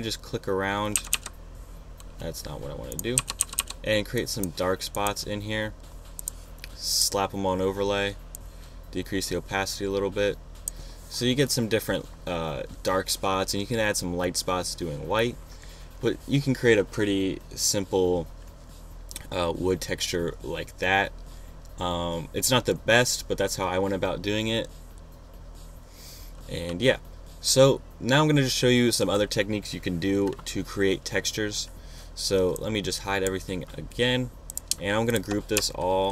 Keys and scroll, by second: 1.0 p, 3.2 [.